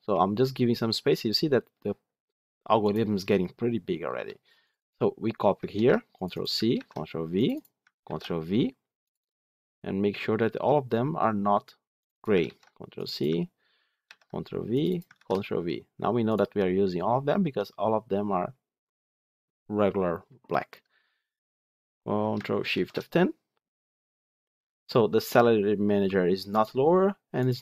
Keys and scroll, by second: 5.6 ctrl+c, 6.6 ctrl+v, 12.3 ctrl+c, 13.9 ctrl+v, 22.6 ctrl+shift+F10.